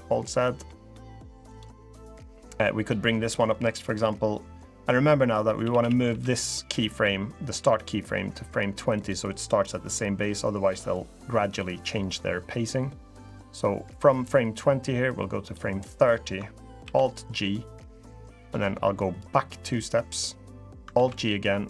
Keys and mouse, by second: 0.1 alt+z, 5.4 a, 5.5 a, 5.8 b, 7.3 g, 8.7 click, 14.0-16.1 drag, 16.6 alt+g, 18.9 click, 20.7 alt+g.